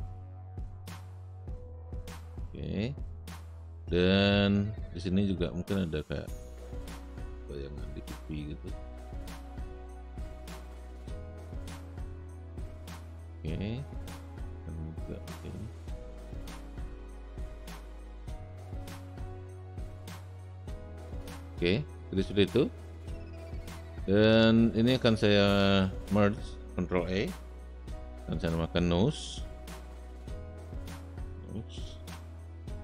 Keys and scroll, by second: 27.1 ctrl+e, 29.5-31.8 typing, 32.0 Return.